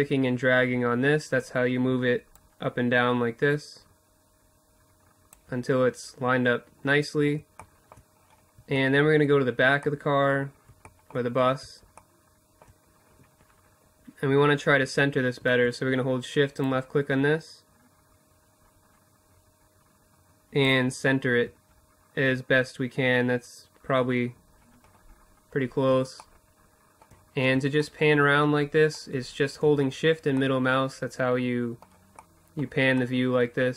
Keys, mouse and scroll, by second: 0.8-2.6 drag, 2.4 typing, 5.0-10.4 middle drag, 15.0 middle click, 15.5-17.7 drag, 15.5 typing, 22.6-32.1 middle drag, 25.2 typing, 27.2 typing.